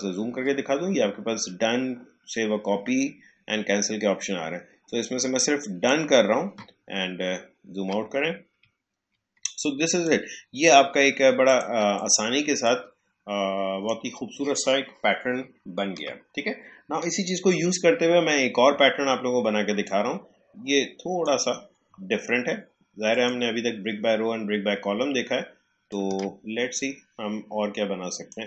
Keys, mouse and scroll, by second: 7.1-7.8 shift+scroll down 1, 8.6 alt+scroll down 1, 9.3 space, 9.6 click, 9.8 space, 11.4-15.9 drag, 15.9 Delete, 19.8-23.0 drag, 25.0-25.8 alt+scroll up 1, 25.8-28.4 alt+drag.